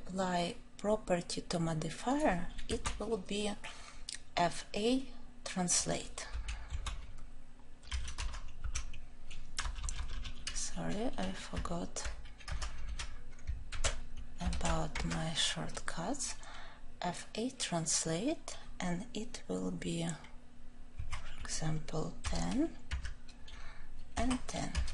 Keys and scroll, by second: 13.7 ctrl+j, 15.0 Return.